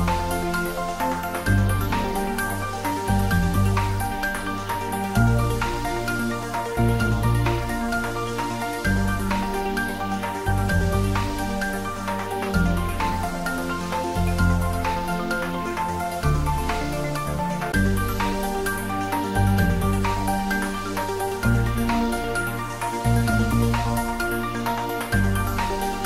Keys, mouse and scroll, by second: 0.3 click, 2.3-3.4 scroll down 1, 3.5 click, 4.7 click, 5.2 ctrl+s, 5.9 click, 7.1 click, 13.0 click, 14.2 click, 15.7 click, 17.4-18.3 typing, 18.8 click, 22.6 click, 24.5 ctrl+s, 25.2 click.